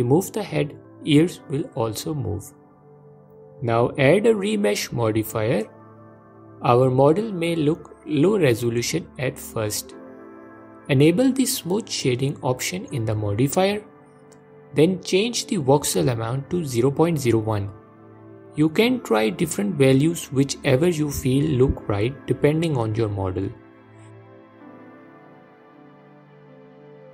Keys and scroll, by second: 0.4 ctrl+z.